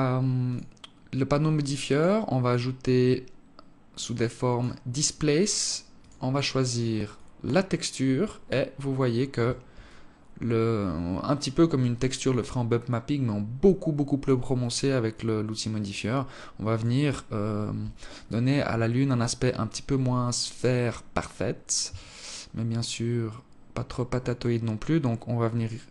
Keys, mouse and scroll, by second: 5.6 click, 8.3-9.5 scroll up 1, 9.5 alt+click, 9.5-9.9 scroll up 1, 11.4 alt+click, 14.2 alt+click, 21.6 shift+click.